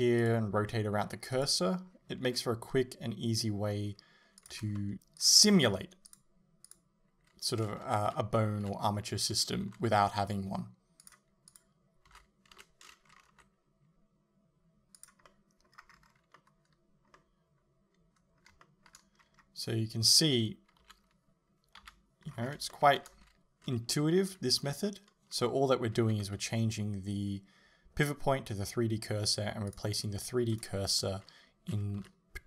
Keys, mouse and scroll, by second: 1.4-4.5 drag, 2.4 r, 4.8 shift+middle click, 4.9 r, 5.3 click, 5.5 a, 6.2 click, 8.1 l, 9.7 r, 11.1 click, 12.1 a, 12.6 l, 13.3 r, 15.3-16.6 middle drag, 15.8-16.4 scroll down 2, 18.7 shift+middle click, 19.2 scroll up 1, 20.9 KP_1, 21.8 KP_3, 22.4-22.8 scroll up 1, 22.8 shift+middle click, 23.2 a, 24.0 l, 26.2 h, 29.8 click, 30.6 right click, 32.1 l.